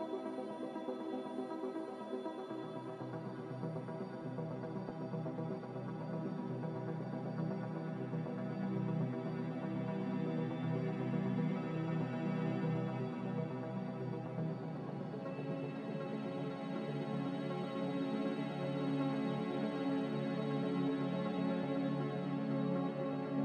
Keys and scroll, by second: 1.6 z, 7.2 typing, 7.4 Return, 11.1 s, 12.6-15.5 typing, 14.1 Tab, 16.0 Return, 17.0 a, 19.5 a.